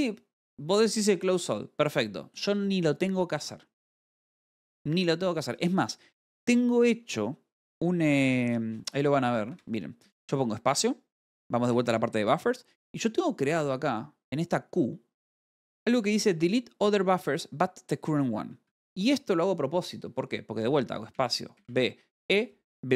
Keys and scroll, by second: 4.2-4.9 typing, 8.9 space, 9.1 o, 9.7 Escape, 13.1 u, 13.7 b, 19.1 Escape, 21.7 space, 22.1 b.